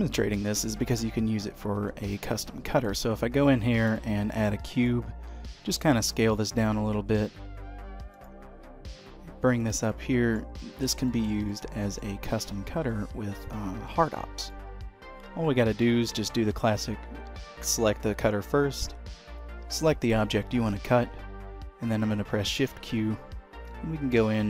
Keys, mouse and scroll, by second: 1.1-1.6 scroll down 2, 1.8 shift+a, 4.9 click, 5.4 s, 6.8 middle click, 8.3 click, 9.1 g, 10.0 middle click, 10.8-11.2 scroll up 3, 11.2 shift+middle click, 11.6 middle click, 13.0 s, 14.0 g, 15.8 shift+click, 22.8 shift+q.